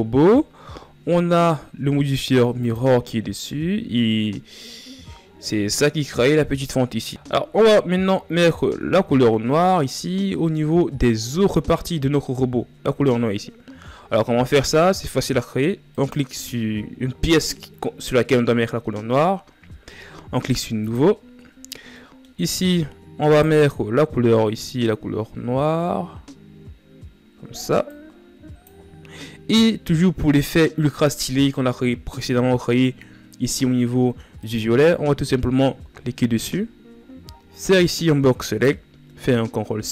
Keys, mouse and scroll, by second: 0.7 shift+z, 7.1-7.5 ctrl+scroll down 3, 7.7-8.6 scroll up 3, 8.6 shift+z, 9.9 ctrl+scroll up 3, 13.7 ctrl+scroll up 1, 15.6 right click, 20.5-22.0 drag, 22.0-23.2 middle drag, 23.2-23.7 scroll up 4, 34.1-36.2 right drag, 36.6 scroll down 6.